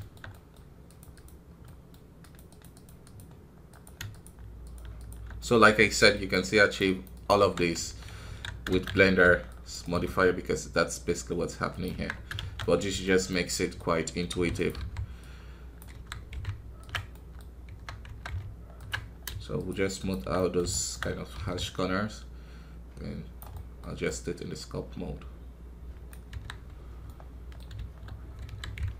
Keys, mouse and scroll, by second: 1.1 click, 1.6 middle click, 2.4-5.3 drag, 5.3 middle click, 6.1-7.3 drag, 7.3 KP_3, 7.7 Tab, 8.0 scroll up 2, 8.1 scroll down 1, 8.2 alt+a, 12.5-14.3 middle drag, 14.3 f, 15.1 click, 15.9 KP_1, 16.4 ctrl+Tab, 17.1 middle click, 17.4 scroll up 2, 17.6 Tab, 19.1 scroll up 2, 19.5 shift+click, 20.3-21.3 middle drag, 21.3 i, 21.5-26.3 drag, 26.3 KP_1, 26.4 scroll down 1, 27.0 scroll down 4, 27.0-28.1 middle drag, 28.1 scroll down 3, 28.4 KP_1, 28.8 ctrl+Tab.